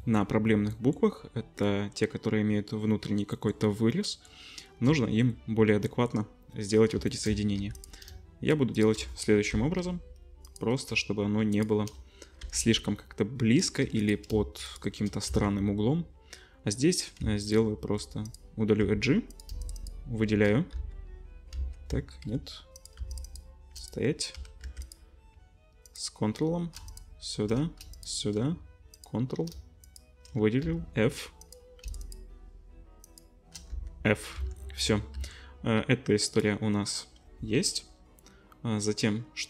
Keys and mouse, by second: 0.8-3.3 shift+middle drag, 3.3 shift+click, 3.5-4.8 shift+middle drag, 4.8-7.8 drag, 7.6 1, 8.7 shift+click, 9.5 j, 10.4 click, 11.5 shift+click, 12.4 j, 13.8 2, 14.0 click, 15.3 x, 17.2 x, 18.8 2, 19.6 alt+shift+click, 19.8 alt+shift+click, 20.7 f, 21.5 ctrl+z, 22.2 2, 22.7 click, 23.2 alt+shift+click, 23.8 click, 24.3 1, 24.6 2, 24.8 click, 25.8 ctrl+click, 26.8 shift+click, 27.9 shift+click, 28.9 ctrl+click, 30.6 f, 31.4 click, 31.8 alt+shift+click, 32.0 alt+shift+click, 33.0 alt+shift+click, 33.7 f, 34.3 Tab, 35.1 Tab, 36.3 right click.